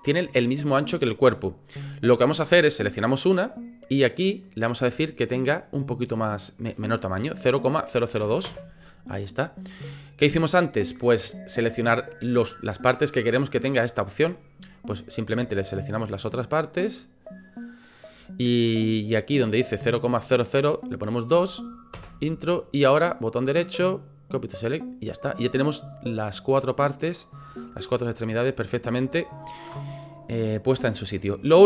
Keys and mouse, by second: 2.7 click, 4.5-9.1 drag, 9.9 middle click, 15.9 shift+click, 16.7 shift+click, 17.5 shift+click, 19.3-22.6 drag, 23.3-24.5 drag, 25.0 click, 25.4-27.3 middle drag, 27.6-29.6 middle drag, 30.7 middle click.